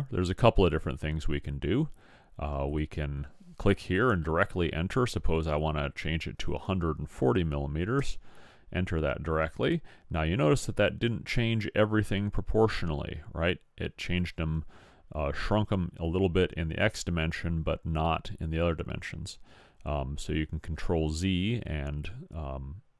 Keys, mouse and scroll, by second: 2.8-4.5 drag, 19.7 ctrl+z.